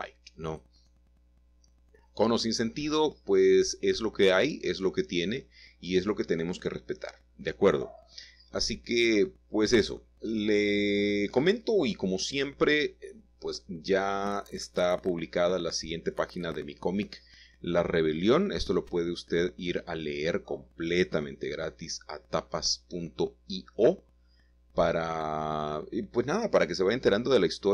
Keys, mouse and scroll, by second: 0.8 shift+click, 3.5 typing, 5.3 click, 5.8 middle click, 7.6 middle click, 7.9-9.0 scroll down 1, 10.2 middle click, 11.3 shift+middle click, 12.0 shift+middle click, 12.3-13.3 scroll down 1, 13.5-14.5 shift+middle drag, 14.9-16.4 scroll up 2, 19.7-22.7 typing, 24.6 typing, 26.6 shift+z.